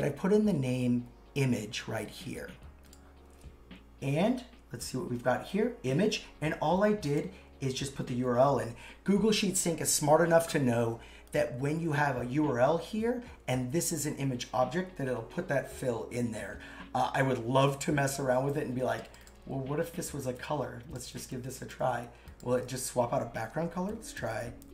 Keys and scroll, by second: 22.5 super+a, 23.9 shift+3.